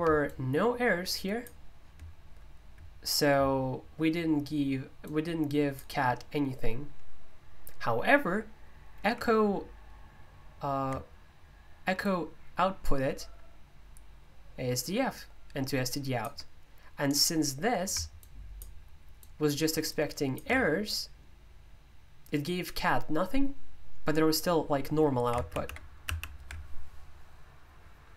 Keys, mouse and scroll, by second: 0.3-3.9 shift+drag, 6.1-8.2 drag, 12.0-23.0 ctrl+alt+drag.